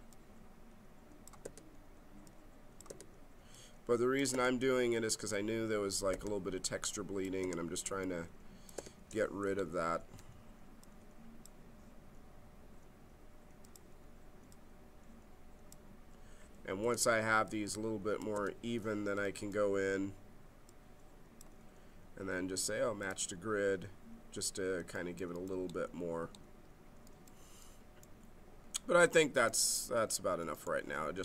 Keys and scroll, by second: 1.4 g, 3.0 g, 4.3 g, 6.1 g, 9.0 g, 16.8 g, 18.3 g.